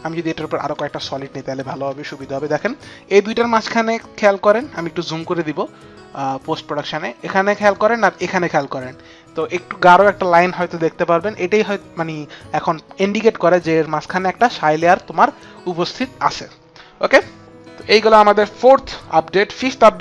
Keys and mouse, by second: 0.1 click, 1.1 ctrl+y, 1.1 click, 1.7 Return, 3.8 Return, 3.8 ctrl+y, 3.8 click.